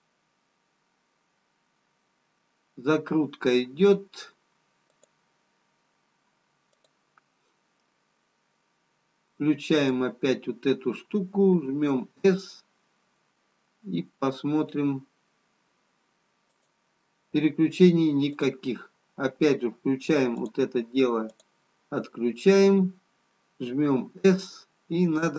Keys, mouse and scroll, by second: 6.9 click, 11.7 s, 18.3 click, 23.9 s.